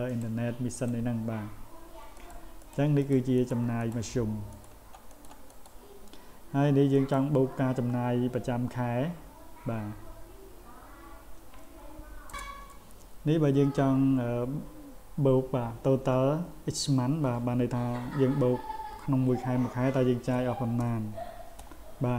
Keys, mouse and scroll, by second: 0.1 click, 0.7 click, 2.1 click, 2.6 click, 3.0 click, 3.4 click, 3.8 click, 4.5 click, 5.1 click, 5.5 click, 6.9 click, 20.3 s.